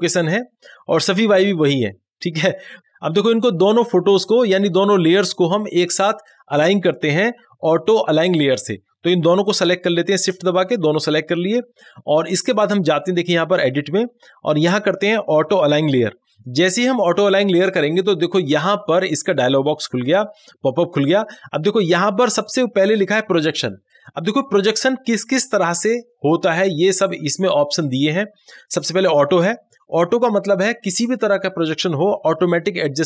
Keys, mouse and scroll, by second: 9.7 click, 10.2 shift+click, 13.1 click, 15.8 click, 19.7 click, 19.8-23.3 drag.